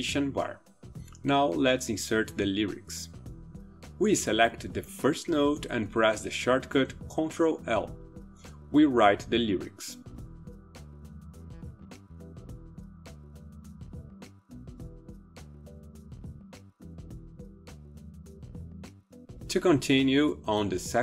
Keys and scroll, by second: 6.7 ctrl+l, 7.8-19.0 typing.